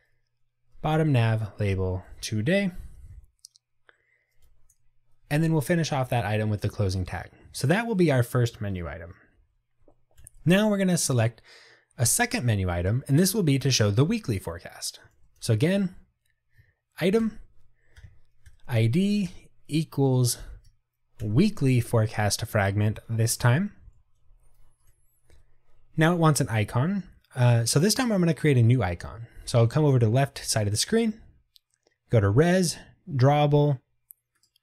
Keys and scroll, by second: 1.1 Tab, 16.7 Tab, 21.5 Return, 25.5 Return.